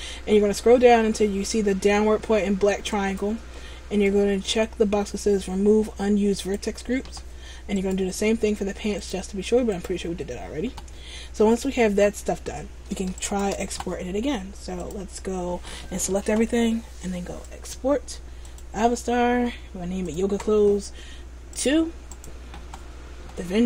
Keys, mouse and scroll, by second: 0.2-3.0 scroll down 5, 3.0 click, 8.0 right click, 9.1 click, 13.4 shift+right click, 14.9 click.